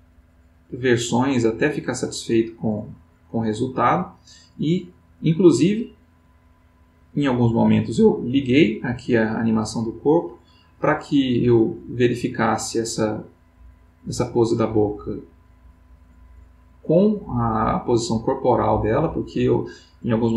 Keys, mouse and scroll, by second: 8.2 click, 10.2-20.3 drag.